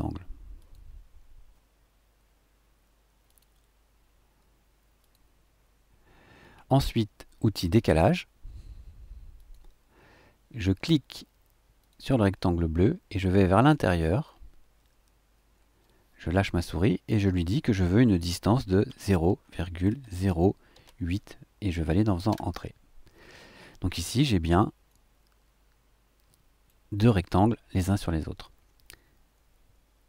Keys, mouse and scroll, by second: 0.5 shift+click, 3.2 shift+click, 5.0 shift+click, 9.3 click, 11.8 click, 18.9 KP_0, 19.2 ,, 19.9 KP_0, 20.7 KP_8, 22.3 KP_Enter, 24.8 click, 25.7-26.9 middle drag.